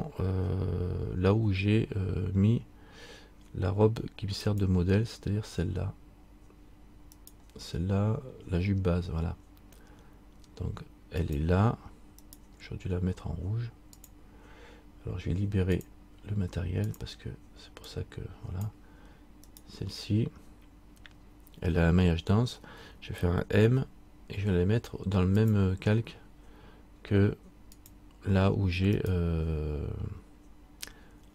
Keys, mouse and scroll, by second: 4.6 click, 7.3 right click, 11.3 click, 12.4 right click, 14.1 click, 15.9 click, 19.7 right click, 27.9 click, 29.2 right click.